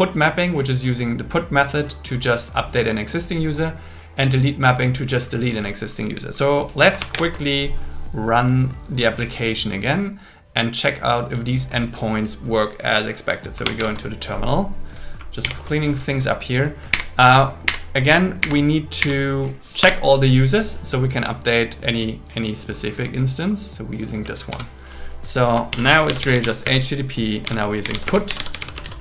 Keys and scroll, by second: 7.1 ctrl+r, 13.8 ctrl+t, 15.4 ctrl+l, 16.9 Up, 18.4 Up, 19.8 Return, 24.5 super+c, 25.7 ctrl+l, 26.7 space, 28.1 space, 28.9 shift+..